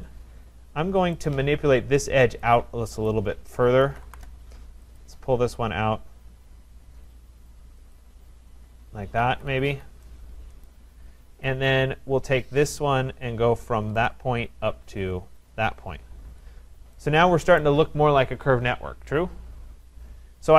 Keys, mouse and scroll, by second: 0.6-1.2 scroll down 3, 1.2 scroll down 1, 1.3 click, 3.1 click, 3.1-3.9 scroll, 3.6-4.6 typing, 5.0 click, 7.9 click, 9.1 Return, 9.3 Escape, 9.5 Escape, 9.7 Escape, 10.6 right click, 10.9-12.8 scroll, 12.8 click, 12.8 scroll, 14.1 click, 14.8 middle click, 15.5 click, 16.3 Return, 17.6 right click.